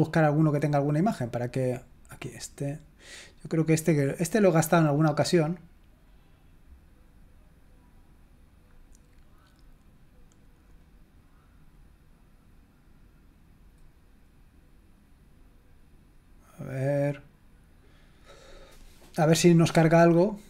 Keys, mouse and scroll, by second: 2.2 click, 8.6-9.1 scroll down 2, 10.7-11.8 drag.